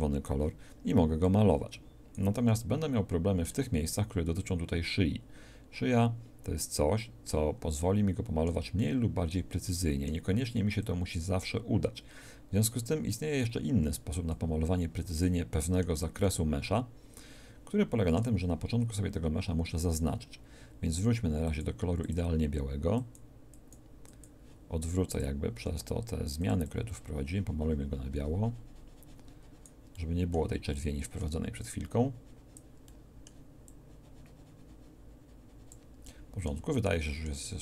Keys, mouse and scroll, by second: 3.1 middle click, 4.0-7.3 drag, 7.8 middle click, 10.8-13.9 drag, 14.4-16.2 drag, 16.2 middle click, 21.5-23.9 drag, 25.5 f, 26.7-27.7 drag, 30.0-32.1 middle drag, 32.1-35.7 drag, 36.1-37.1 middle drag.